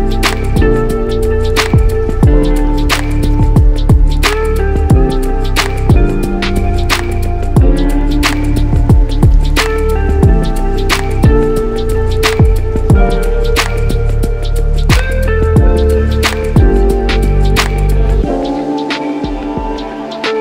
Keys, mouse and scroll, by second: 1.1 click, 1.9-3.6 drag, 2.2 1, 2.4 3, 2.5 Return, 3.8 click, 4.3 click, 4.8 click, 5.2-7.7 drag, 5.4 2, 5.5 0, 5.6 Return, 6.6 5, 6.7 0, 6.8 Return, 8.1 click, 8.6 click, 9.4 click, 9.9-11.2 drag, 10.2 2, 10.4 5, 10.5 Return, 12.1-13.8 drag, 14.1-16.3 drag, 19.3-20.4 drag.